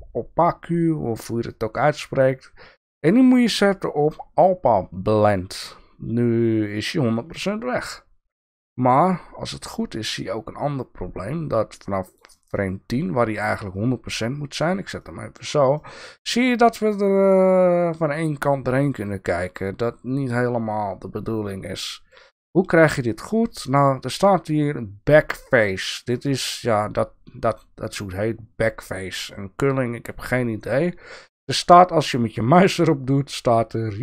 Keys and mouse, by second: 1.5-5.2 drag, 7.7-12.1 drag, 12.5-13.0 middle drag, 14.6 click, 15.0-15.3 shift+middle drag, 15.7-16.9 drag, 16.9-22.1 middle drag.